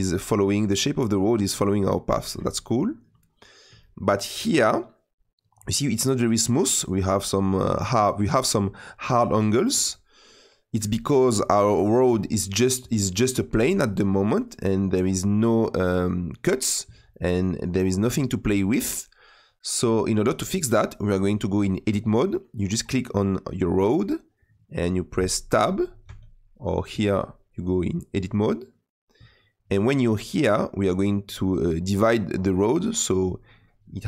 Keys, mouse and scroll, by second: 3.2-3.6 scroll up 4, 3.7-14.6 shift+middle drag, 14.6 click, 16.0 click, 17.2-18.8 middle drag, 18.8 click, 22.4 click, 23.0 click, 26.0 Tab.